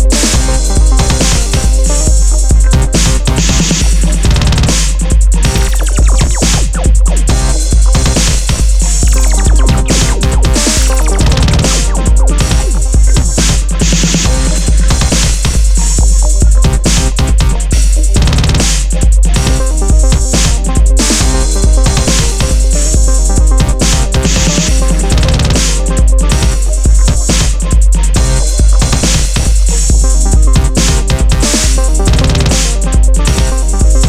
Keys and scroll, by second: 1.7 alt+BackSpace, 2.1 super+d, 3.3 super+-, 4.1 alt+shift+super+e.